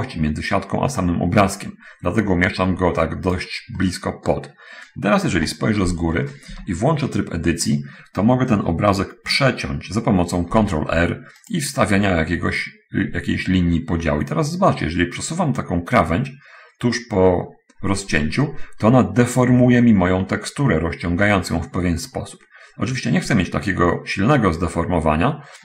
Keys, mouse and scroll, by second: 4.1 middle click, 5.7 7, 6.8 Tab, 10.5 ctrl+r, 11.8 click.